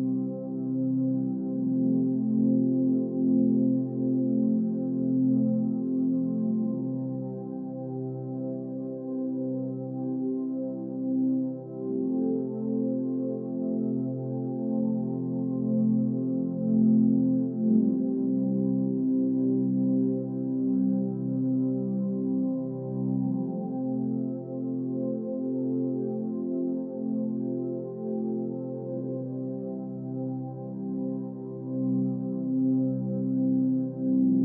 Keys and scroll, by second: 1.6 Right, 1.6 Up, 1.9 Right, 3.8 Up, 3.8 Right, 4.0 Up, 4.0 Right, 5.9 Delete, 8.1 Menu, 9.4 ctrl+a, 11.1 ctrl+-, 18.5 space, 20.6 space, 21.4 space.